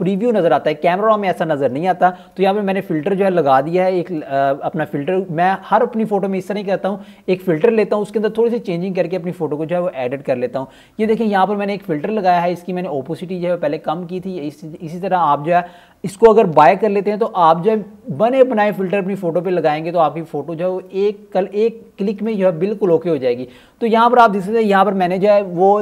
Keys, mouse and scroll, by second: 1.2 click, 4.1 click, 9.2-12.8 scroll up 1, 15.7-17.9 scroll down 1, 18.1 click, 23.5 scroll up 1, 24.3 click.